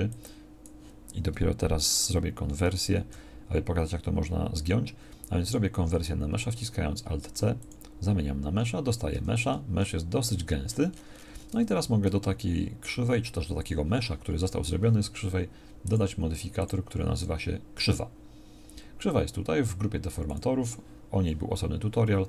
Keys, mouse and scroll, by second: 2.8 alt+c, 9.1 Tab, 11.5 Tab.